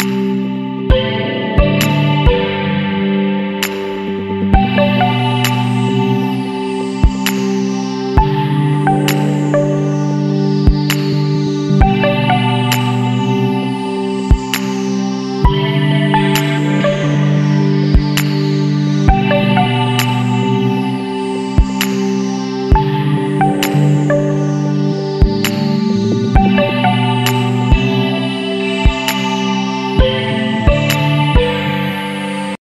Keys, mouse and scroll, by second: 0.2 click, 0.6 BackSpace, 1.1-1.9 scroll up 3, 2.2 scroll down 2, 2.6 Down, 3.8 Down, 4.3 Left, 5.1 scroll down 2, 5.5 scroll up 2, 6.5-8.1 drag, 8.8 scroll up 2, 10.4 Right, 12.1 Up, 13.4 Left, 16.5 click, 18.0 click, 19.0 scroll up 1, 19.5 scroll down 1, 20.9 middle click, 21.3-24.9 drag, 25.2 Down, 26.1 Right, 26.8 Left, 28.6-31.2 drag.